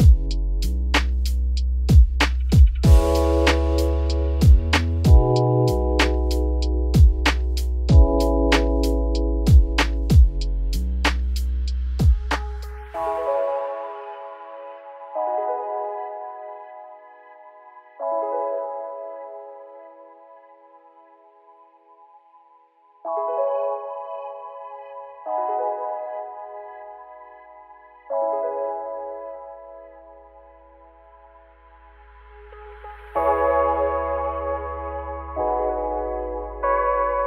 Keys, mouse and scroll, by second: 0.7 click, 0.9 Tab, 1.5 middle click, 1.9 Tab, 2.1 scroll up 2, 2.4 middle click, 2.7 Tab, 2.9 scroll down 1, 3.0 middle click, 3.4 scroll up 1, 3.5 1, 3.9 click, 4.2 `, 4.6 scroll down 4, 4.8 middle click, 5.3-5.7 scroll up 4, 5.7 scroll down 1, 5.8 middle click, 6.1 Tab, 6.3 scroll down 1, 6.5-7.8 middle drag, 9.1-11.1 scroll up 3, 11.1 middle drag, 11.4-12.5 scroll up 6, 11.5 n, 12.0 middle drag, 12.5-12.9 shift+middle drag, 12.9 click, 13.3-13.9 middle drag, 13.9 shift+click, 16.4 middle click, 16.8 Tab, 17.0-17.5 scroll up 2, 17.5 Tab, 19.0 ctrl+j, 19.6 Tab, 20.1 a, 21.7 m, 24.0 click, 24.3 scroll down 2, 24.5 middle click, 25.0-25.4 scroll up 2, 25.4 click, 25.7 scroll up 1, 25.8 2, 26.0 click, 26.4 g, 28.5 middle click, 28.9 1, 30.6 click, 31.3 g, 33.3 1, 33.7 click, 34.1 g, 35.3 scroll up 1, 35.3 middle click, 36.0 click, 36.4 g.